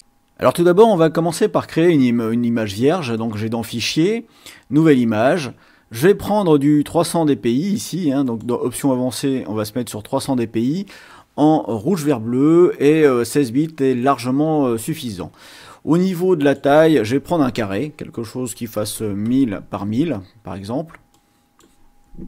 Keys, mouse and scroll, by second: 3.3 click, 4.9 click, 8.4 click, 16.1 click, 18.7 KP_1, 18.9 KP_0, 21.1 click.